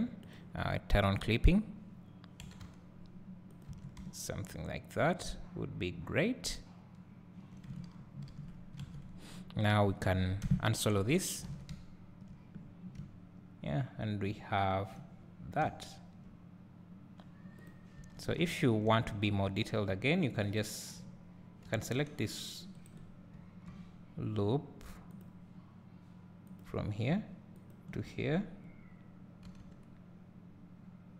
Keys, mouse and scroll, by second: 1.1 click, 2.5 g, 4.1 `, 8.8 alt+a, 10.5 KP_Divide, 11.3 scroll down 1, 11.5 alt+a, 12.8 scroll up 2, 13.0 `, 15.2-16.0 scroll up 2, 16.0 `, 17.0-17.8 scroll up 2, 17.8 click, 18.0 Tab, 18.9 `, 20.6 alt+click, 21.7 g, 23.0 right click, 23.1-23.5 scroll down 1, 23.5 `, 23.9-25.2 drag, 23.9-25.2 scroll up 2, 29.5 g.